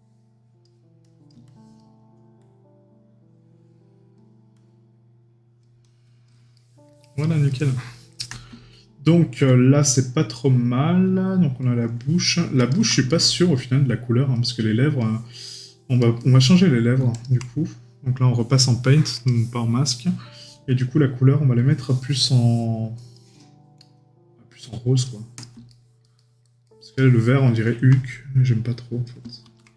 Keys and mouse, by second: 6.5 right click, 16.0 right click, 22.1 right click, 25.7 right click, 26.6 middle click, 27.1 right click.